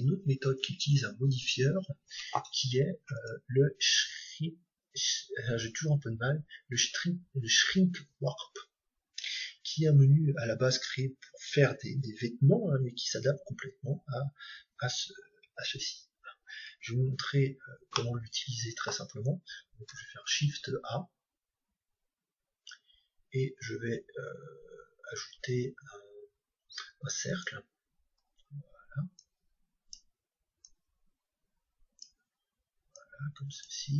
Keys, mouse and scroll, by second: 3.1-5.0 drag, 17.3-19.7 middle drag, 19.7 shift+a, 28.3-30.3 middle drag, 29.1-32.6 drag, 33.0-33.9 drag.